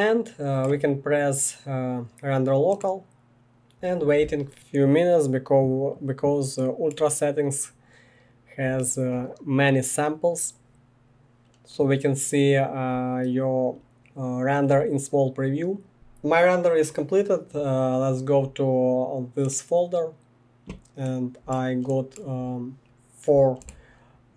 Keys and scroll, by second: 15.9 Escape.